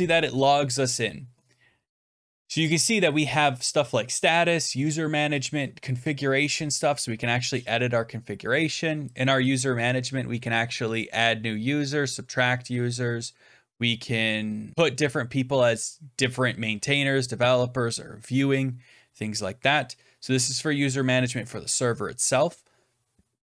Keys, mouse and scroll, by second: 5.3-6.4 drag, 7.0-8.0 scroll down 20, 9.1 click, 9.4 click, 10.9 click.